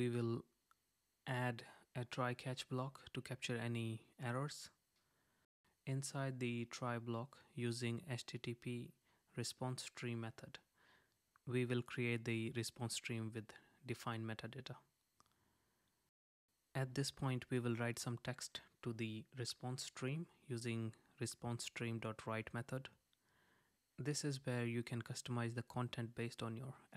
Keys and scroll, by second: 3.7 super+z, 11.2 super+z, 16.4 Right, 19.7 super+z, 21.1 Right.